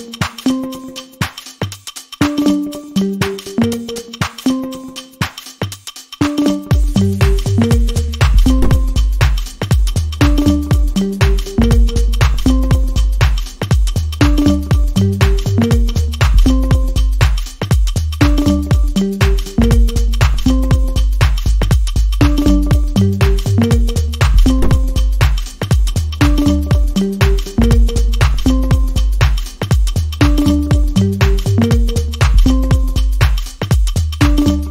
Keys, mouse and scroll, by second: 1.3 click, 27.5 Down, 27.8 Down, 30.3-31.4 alt+scroll down 1, 31.4 alt+scroll down 1.